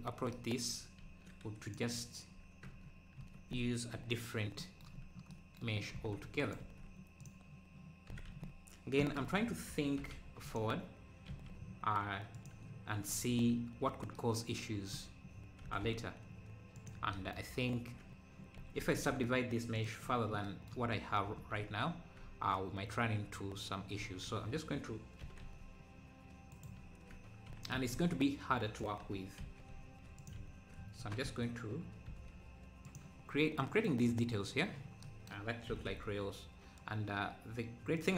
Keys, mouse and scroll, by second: 0.7 Tab, 1.6-2.7 drag, 2.7 Tab, 3.9 KP_3, 5.0-5.3 scroll up 4, 6.0 ctrl+s, 6.4 shift+right click, 6.6 shift+a, 8.1 r, 15.6 g, 18.8 s, 25.2 s, 27.7 s, 31.0 s, 33.4 scroll up 3, 33.6-35.0 middle drag, 35.0 scroll, 35.7 g.